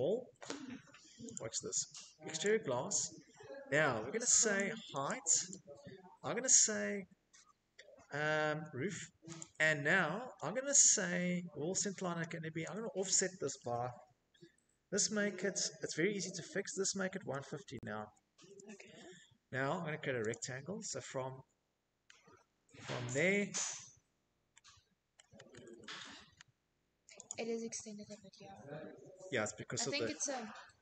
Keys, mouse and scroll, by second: 0.5 click, 2.6 click, 3.1 click, 3.5 click, 7.5 click, 9.5 click, 11.1 click, 15.0-17.0 typing, 18.1-18.8 typing, 22.5 click, 22.5 scroll, 23.2-24.5 scroll, 24.7 middle click, 25.3 click.